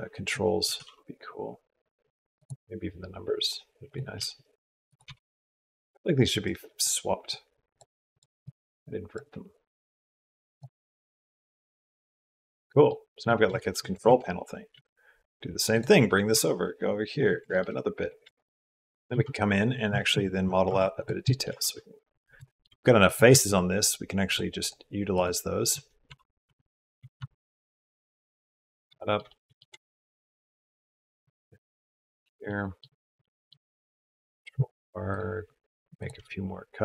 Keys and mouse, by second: 0.4 s, 2.5 g, 3.9 s, 4.8 g, 6.3 click, 7.1 click, 7.9 click, 8.2 click, 9.5 click, 11.1-12.7 drag, 13.4 shift+click, 13.5 shift+middle click, 13.8 shift+d, 15.5 click, 16.1 Tab, 17.3 shift+middle click, 18.3 shift+middle click, 18.4 shift+middle click, 18.4 g, 18.9 Tab, 19.8 shift+middle click, 20.5 Tab, 20.8 middle click, 21.1 click, 21.3 Tab, 22.3 shift+click, 23.6 shift+click, 24.0 shift+click, 24.4 shift+click, 25.9 e, 28.3 middle click, 31.6 shift+middle click, 32.3 shift+middle click, 33.0 middle click, 34.3 ctrl+r.